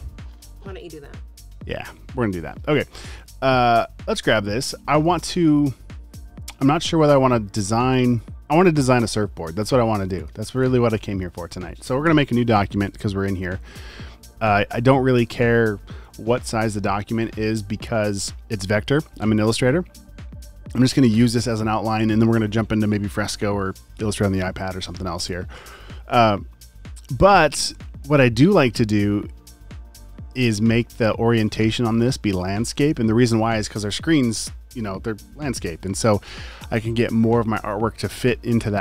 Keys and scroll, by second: 12.1 super+n.